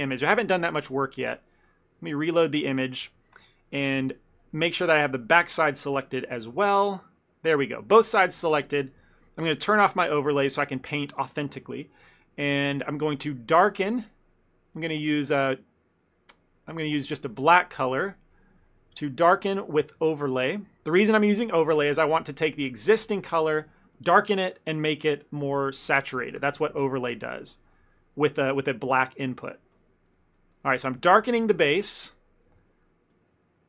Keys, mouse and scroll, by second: 3.1 click, 3.2 ctrl+middle click, 4.0 KP_1, 4.8 middle click, 5.1 middle click, 5.2 ctrl+middle click, 6.5 l, 7.3 middle click, 8.7 KP_1, 10.0 click, 10.5 ctrl+middle click, 10.7 shift+middle click, 12.4 f, 14.8 click, 16.9 click, 21.9 click, 22.2 shift+f, 23.2 ctrl+middle click, 23.5 f, 26.5 f, 26.9 ctrl+middle click, 27.4 click, 27.7 click, 28.2 click, 28.7 click, 28.9 click, 29.2 shift+middle click, 29.4 ctrl+middle click, 29.9 click, 30.2 click, 30.4 click, 30.7 click, 30.9 click, 31.0 click, 31.4 shift+middle click, 31.6 ctrl+middle click, 31.9 ctrl+middle click, 31.9 shift+middle click, 32.2 ctrl+middle click, 32.3 shift+middle click, 32.7 shift+f.